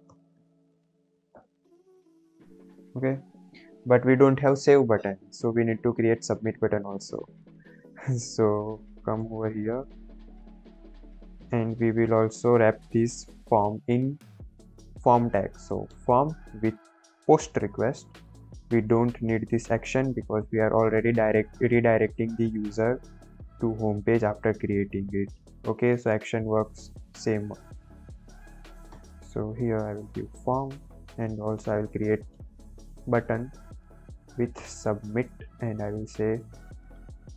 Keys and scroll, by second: 9.1 Return, 9.3 Return, 10.2 BackSpace, 12.0 shift+Left, 14.7 ctrl+x, 15.4-16.4 typing, 16.6 Down, 17.0 Down, 17.3 Return, 18.0 Right, 18.2 Right, 18.9 BackSpace, 28.5 Right, 28.8 Return, 30.0 ctrl+v, 30.8 Return, 31.4 Return, 32.0-33.4 typing, 33.5 Down, 33.7 Down, 36.0-37.3 typing.